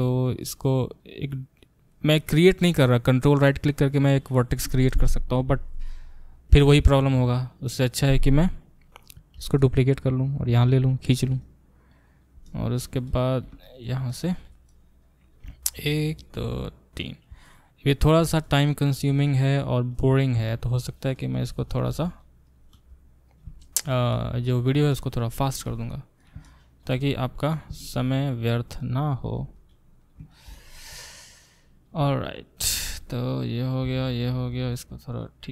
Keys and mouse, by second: 1.0-11.4 middle drag, 9.4 shift+d, 11.4-16.3 drag, 15.4 e, 16.3-18.4 middle drag, 18.4-21.8 drag, 21.8-28.8 middle drag, 21.9 e, 22.7 e, 26.9 e, 28.8-30.1 drag, 29.4 e, 30.1 shift+middle click, 30.3 shift+click, 30.4-32.3 middle drag, 32.3-35.5 drag.